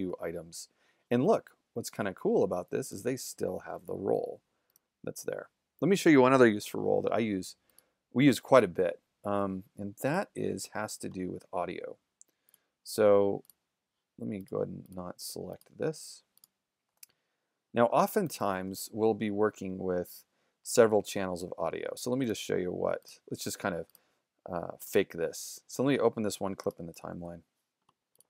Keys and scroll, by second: 0.0 shift+z, 5.1 shift+z, 17.9 shift+z, 18.3 super+=, 27.0 super+-.